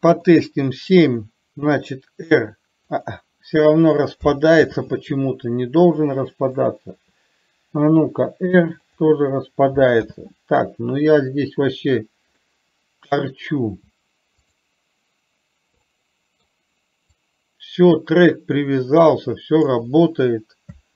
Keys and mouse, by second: 0.4 KP_7, 2.0 r, 4.9 ctrl+z, 6.7 click, 8.3 r, 10.3 ctrl+z, 12.7-13.3 middle drag, 16.2-16.7 middle drag, 17.4-19.9 drag.